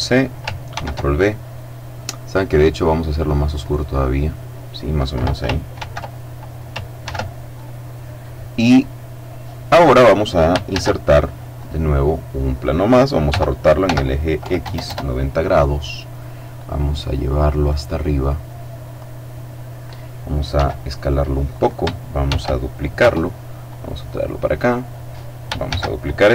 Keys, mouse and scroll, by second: 0.5 ctrl+v, 2.1 click, 3.2 click, 5.5 ctrl+c, 6.7 ctrl+v, 8.7-9.3 scroll up 2, 9.3-10.2 scroll down 2, 10.4 shift+a, 11.3 click, 13.0 r, 13.5 x, 14.3 KP_0, 14.5 KP_Enter, 16.3-17.9 drag, 17.9-20.1 drag, 20.3 s, 21.2 click, 21.9 shift+d, 22.6 Return, 23.4-24.8 drag, 25.3 shift+d, 26.0 Return.